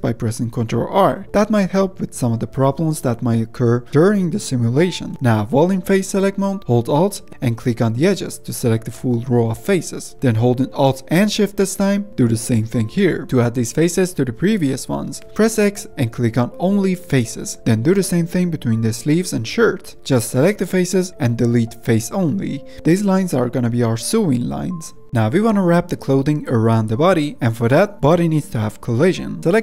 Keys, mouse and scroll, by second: 1.5 ctrl+r, 3.3 middle click, 3.5 ctrl+r, 5.1-8.9 middle drag, 8.9 3, 9.9 alt+click, 10.5-12.2 middle drag, 12.2 alt+shift+click, 17.7 x, 17.9-18.6 scroll up 1, 20.2 alt+click, 22.5 x, 22.7-23.7 middle drag, 23.7 alt+click, 24.3 x, 24.5 scroll down 1, 24.6-26.2 middle drag, 26.2 scroll down 1, 26.5 Tab, 26.8 scroll down 1, 27.5-29.4 middle drag, 29.4 Tab.